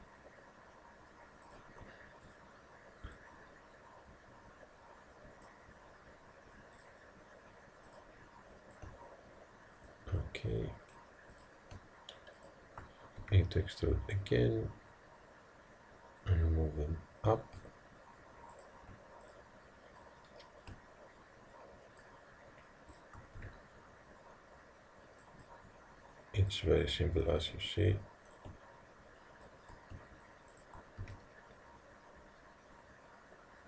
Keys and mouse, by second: 2.3-5.0 drag, 6.8-10.6 drag, 11.4-14.1 drag, 13.3 e, 19.3-21.8 drag, 23.0-24.6 drag, 23.4 e, 26.5 click, 28.4 click, 30.6 click, 31.1 e.